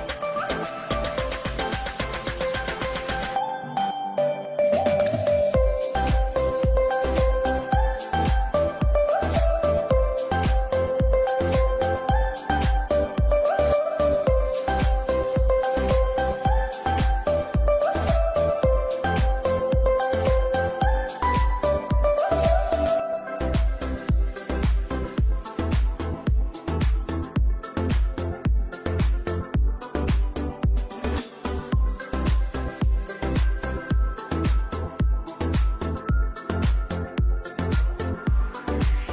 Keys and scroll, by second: 1.2 c, 1.8 Escape, 4.1 c, 9.2 F2, 11.4 c, 11.7 Escape, 20.1 c, 20.4 Escape, 24.9 F3, 25.2 Escape, 27.7 F2, 33.5 Escape, 36.6 space, 37.4 c.